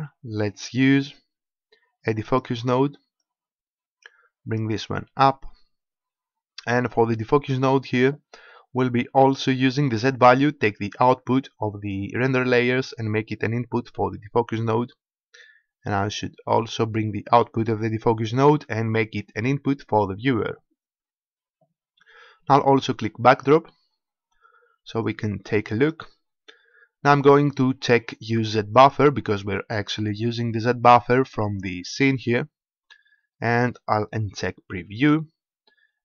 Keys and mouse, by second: 3.1-5.1 drag, 6.5-8.4 drag, 9.3-11.2 drag, 16.7-17.7 drag, 23.3-25.3 drag, 34.9-36.0 drag.